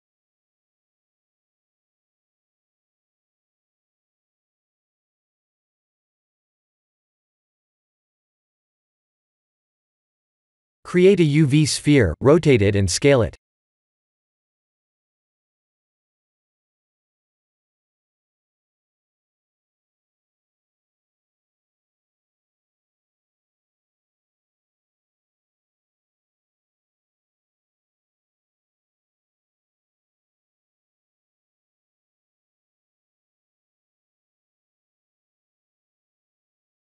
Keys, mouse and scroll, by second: 0.3 KP_1, 5.5-8.5 scroll down 2, 9.7 click, 10.2 scroll up 2, 11.3 scroll up 1, 11.5 shift+a, 21.0 s, 22.6 ctrl+z, 23.0 r, 24.7 ctrl+z, 25.4 r, 28.1 right click, 29.3 s, 32.9 s, 35.7 click.